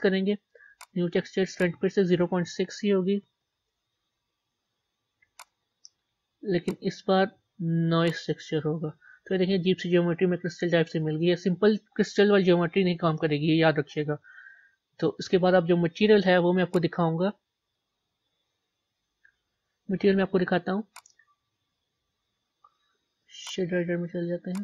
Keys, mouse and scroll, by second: 3.5-9.0 drag, 9.0-14.3 middle drag, 14.3 scroll down 2, 17.7 click, 21.8-24.6 drag.